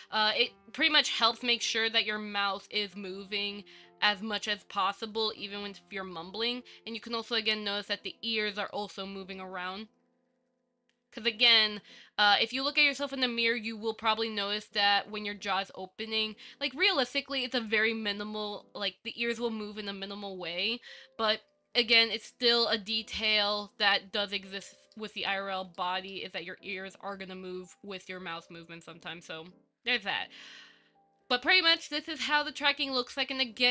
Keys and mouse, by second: 7.5-8.0 middle drag, 8.9-9.6 shift+middle drag, 13.1-14.8 middle drag, 22.4-23.5 middle drag, 24.0-25.2 middle drag, 26.0-26.3 shift+middle drag, 31.8-33.7 middle drag.